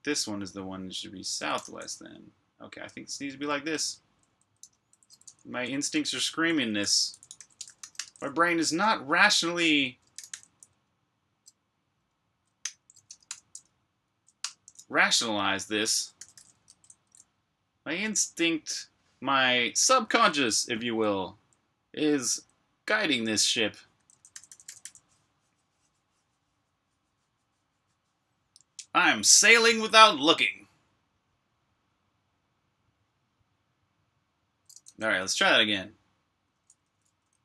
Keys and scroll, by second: 1.4-6.3 typing, 7.8 typing, 12.3-13.5 typing, 14.3 Return, 16.1-17.8 typing, 16.6 super+b, 20.7-22.2 typing, 23.9-24.7 typing, 36.4-37.4 typing.